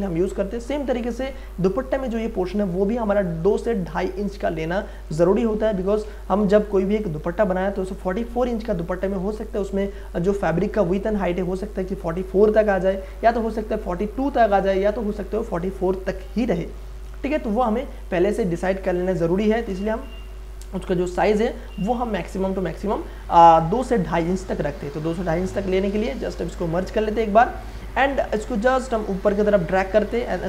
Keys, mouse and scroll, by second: 1.1 ctrl+d, 3.6-6.4 drag, 6.3 ctrl+d, 6.7 ctrl+space, 7.0 ctrl+click, 7.3 ctrl+space, 12.1 click, 12.2-13.9 drag, 13.9-15.5 drag, 15.5-18.6 drag, 18.6 ctrl+space, 18.9 ctrl+click, 19.1 ctrl+space, 19.4 ctrl+d, 19.7 space, 20.0 click, 20.2 space, 21.1 ctrl+click, 21.7 v, 22.2 click, 24.7 ctrl+z, 25.7 shift+click, 26.8 ctrl+e, 27.6 click, 27.8 space, 28.0 ctrl+click, 29.0-30.4 drag.